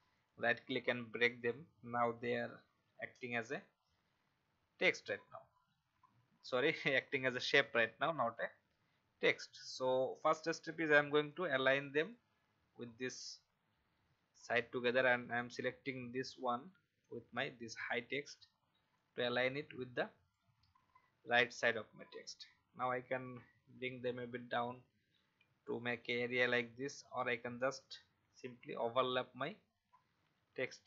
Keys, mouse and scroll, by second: 0.1 click, 7.4-8.2 alt+scroll up 1, 8.2 click, 9.4-10.1 alt+scroll down 1, 10.1 click, 11.2 shift+click, 16.5 shift+click, 19.0 shift+click, 23.3 Down, 23.7 Down, 23.8 Down, 23.9 Down, 26.8-27.9 Up.